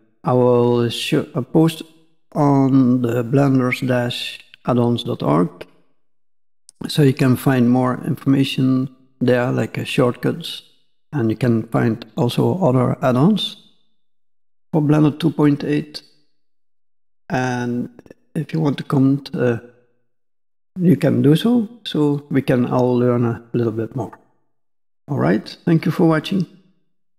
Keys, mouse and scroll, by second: 16.5-16.8 scroll down 2, 16.8 middle click, 17.9-18.4 scroll up 2, 19.2 middle click.